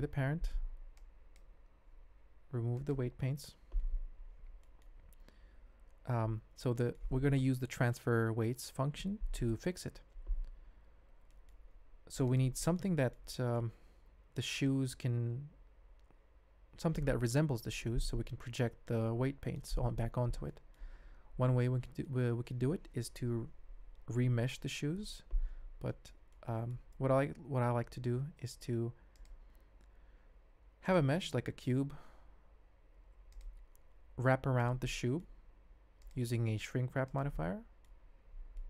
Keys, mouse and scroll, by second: 2.7-3.4 drag, 4.6 shift+middle drag, 5.5 alt+h, 5.7 alt+a, 6.7-7.0 drag, 11.3 shift+middle click, 12.6 middle drag, 13.0 alt+click, 13.3 middle drag, 17.9 g, 20.4-20.7 drag, 22.0 middle click, 25.9 shift+middle click, 26.3-26.8 middle drag, 28.0 shift+a, 31.6 s, 33.6 g, 34.8 click, 35.4 s, 36.3 s, 37.3-37.8 drag, 38.0 alt+z, 38.5-38.6 middle drag.